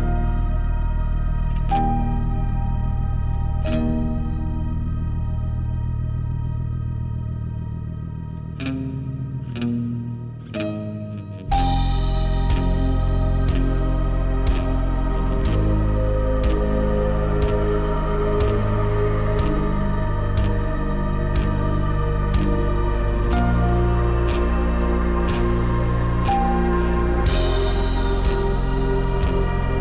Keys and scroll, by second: 2.2 5, 2.7 3, 2.9 Return, 3.2 Return, 3.5 5, 8.1 ., 8.3 ., 8.5 Return, 24.6 Return, 26.7 4, 26.9 5.